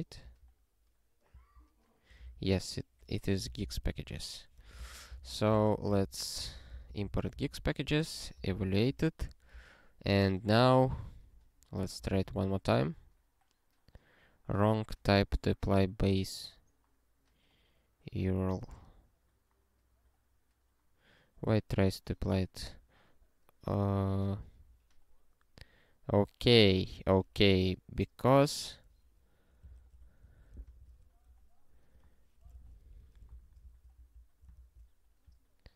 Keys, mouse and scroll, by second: 0.2 ctrl+v, 1.3 ctrl+v, 2.2 super+w, 3.4 alt+b, 3.6 alt+b, 4.0-6.0 typing, 4.8 alt+d, 6.0 ctrl+n, 6.1 ctrl+n, 6.5 ctrl+g, 6.7 ctrl+n, 6.9 ctrl+n, 7.0 ctrl+n, 7.4 ctrl+e, 8.5 alt+>, 9.7 scroll up 1, 10.5 click, 11.5 scroll up 1, 12.1 ctrl+e, 14.9 scroll up 1, 20.0 scroll up 4, 24.4 click, 28.2 BackSpace, 29.8 ctrl+alt+@, 30.2 Tab, 30.9 ctrl+s, 32.0 click, 32.5 ctrl+p, 32.9 BackSpace, 33.3 ctrl+n, 33.7 alt+f, 33.9 alt+f, 34.5 ctrl+f.